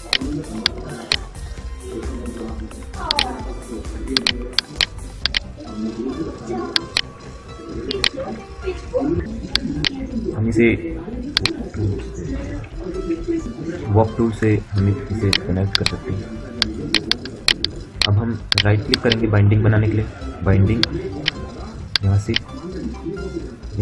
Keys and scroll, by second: 8.5 F9, 12.7 F9, 14.0 w.